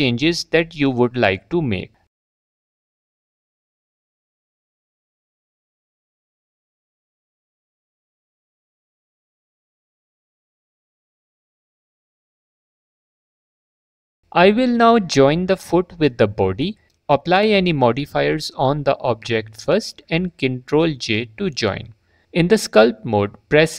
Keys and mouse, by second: 0.8 s, 2.0 click, 2.3 drag, 2.5-3.2 drag, 3.3 click, 3.7 Tab, 4.4 click, 5.6 click, 6.5 shift+click, 8.3 f, 8.5 click, 9.5 click, 10.0 alt+click, 11.4 Tab, 13.4 click, 18.1 click, 19.5 shift+click, 20.3 click, 22.8 Tab.